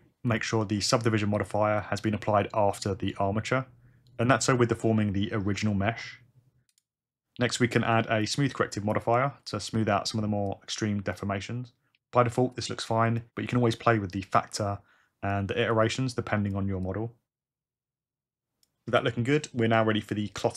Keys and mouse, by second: 0.4 click, 1.8 click, 6.7-9.0 drag, 10.5-11.2 drag, 12.5 click, 13.6-15.3 drag, 15.8 click, 16.8-18.6 drag.